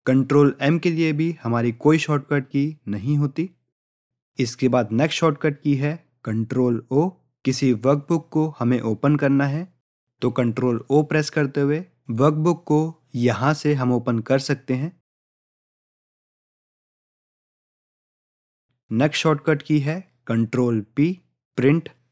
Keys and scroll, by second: 8.1 ctrl+o.